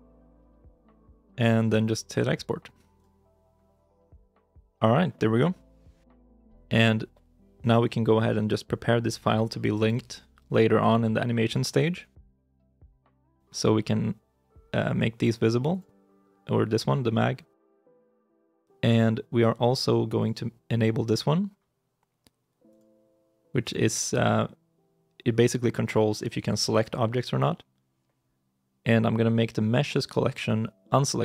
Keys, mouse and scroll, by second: 7.8-9.8 scroll down 1.